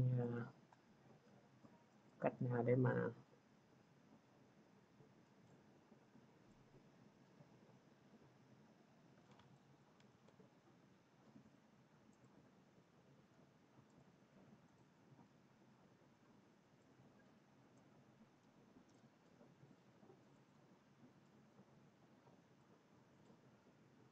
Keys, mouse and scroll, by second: 9.4 click, 10.1 ctrl+z, 12.1 click, 13.9 click, 14.6 click, 16.8 click, 17.1-17.4 scroll.